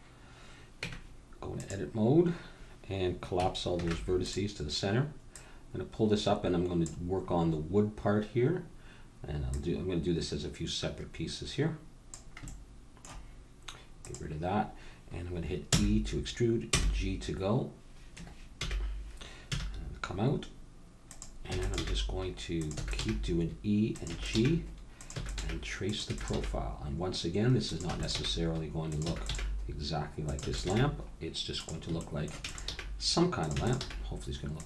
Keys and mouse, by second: 0.8 Tab, 3.7 alt+m, 5.3 click, 7.2-9.4 middle drag, 9.4-12.1 drag, 13.9-15.8 drag, 15.7 e, 18.5 g, 21.4 e, 21.8 g, 22.7 e, 23.0 g, 24.1-26.3 typing, 27.9-30.7 typing, 32.5-34.6 typing.